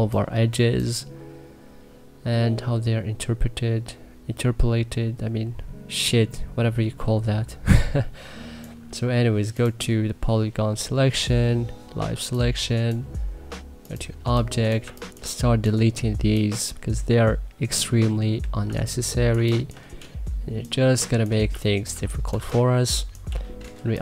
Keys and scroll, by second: 14.0 3, 14.6 1, 15.0 2, 18.4 3, 19.1 1, 21.0-22.6 typing.